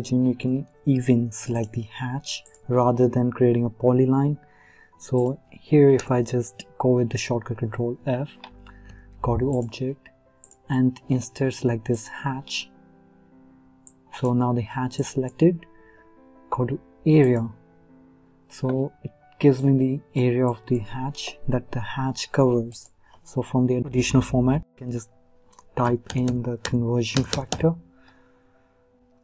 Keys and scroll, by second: 6.0 ctrl+f.